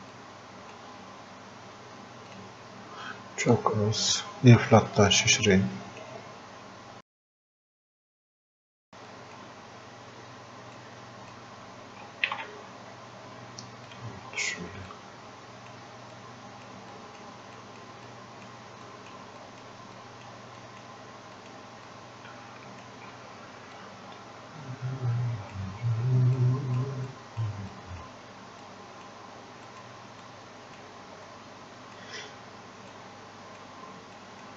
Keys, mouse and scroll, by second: 0.1-2.3 drag, 5.1-6.7 drag, 6.7-7.2 scroll up 1, 7.5 alt+click, 8.3 click, 9.1-12.3 drag, 12.3 ctrl+z, 13.9 click, 16.2-27.1 drag, 27.1 click, 27.8 click, 29.7 click, 31.3-34.2 drag.